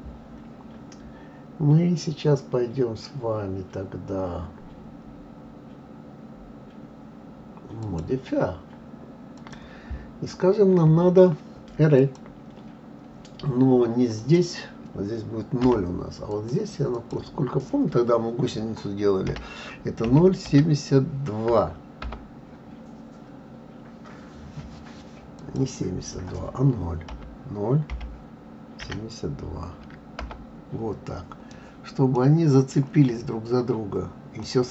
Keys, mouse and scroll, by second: 7.8 click, 9.4-12.4 drag, 14.2-16.5 drag, 16.9-20.0 drag, 25.4-28.4 drag, 32.1-33.1 middle drag, 33.1-34.4 scroll up 4, 34.4-34.7 middle drag.